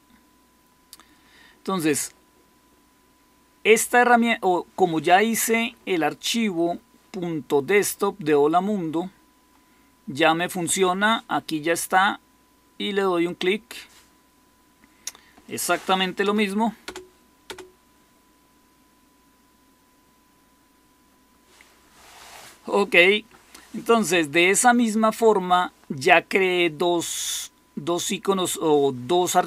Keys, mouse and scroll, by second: 16.2 Return, 16.8 Return, 17.4 Return.